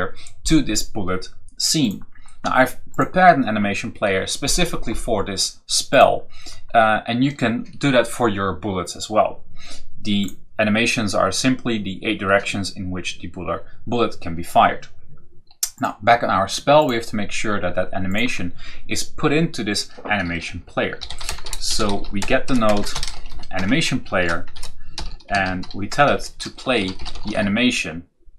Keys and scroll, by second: 20.5-27.7 typing.